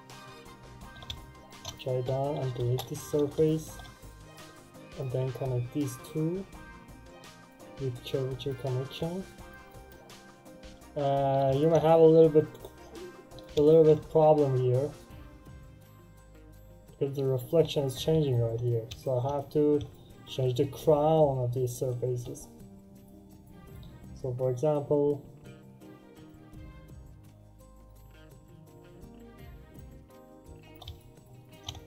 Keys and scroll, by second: 2.5 Return.